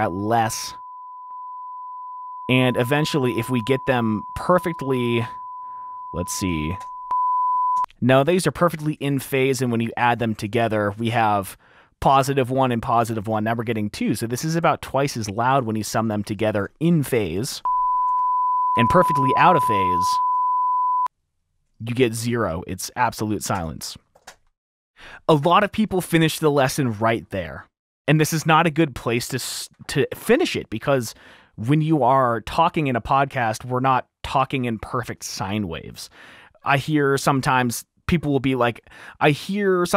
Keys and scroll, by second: 6.9 F7, 7.8 F7, 7.9 space, 10.4-11.3 typing, 13.8 r, 17.7 space, 18.3 super+4, 18.8 space, 19.0 F2, 23.7-24.1 typing.